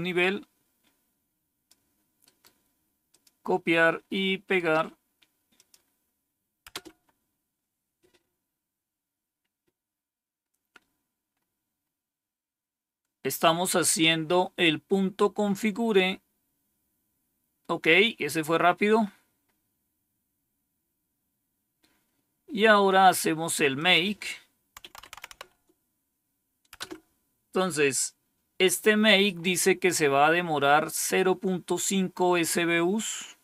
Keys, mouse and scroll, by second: 3.0 click, 4.4 right click, 5.5 click, 6.6 Return, 13.6-14.0 scroll down 1, 14.5-14.8 scroll down 1, 15.7 scroll down 1, 20.4-23.0 scroll down 3, 23.0-23.7 scroll down 1, 23.7 click, 24.5-25.7 typing, 26.7 Return.